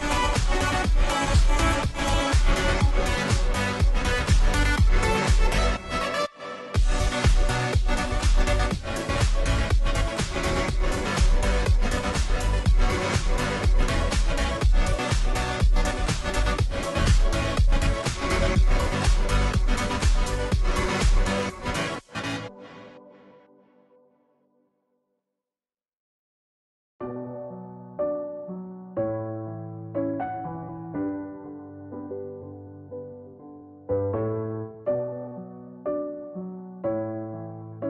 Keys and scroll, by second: 17.1 Return, 21.6-22.3 space, 23.4 space.